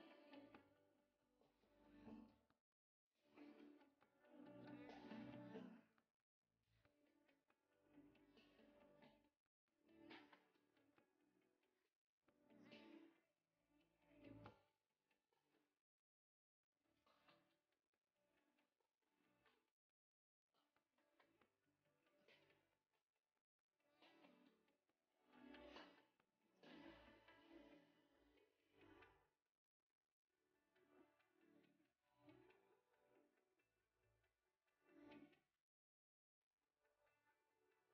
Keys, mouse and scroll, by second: 0.0 shift+middle click, 0.2-10.3 typing, 1.2 shift+middle click, 5.2 shift+middle click, 5.4 scroll up 2, 11.3-15.9 typing, 14.9 scroll down 2, 15.1 shift+middle click, 17.1 e, 18.2 s, 19.6-22.0 typing, 22.2 ctrl+e, 22.6 ctrl+r, 23.2 a, 23.3 c, 25.1-31.4 typing, 30.1 ctrl+r, 32.7 c, 34.4 g, 35.3 a, 35.8 c, 36.3 g, 37.3 c.